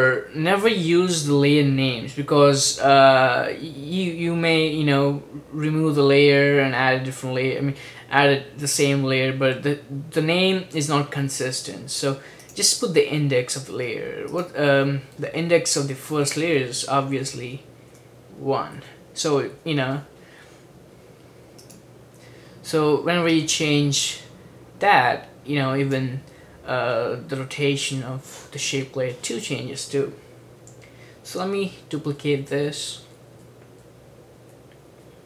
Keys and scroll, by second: 15.4-18.9 typing, 31.3 super+d, 31.7 super+d, 31.9 super+d, 32.4 super+d, 32.7 super+d, 33.0 super+d, 33.1 super+d, 33.5 super+d, 35.1 super+d.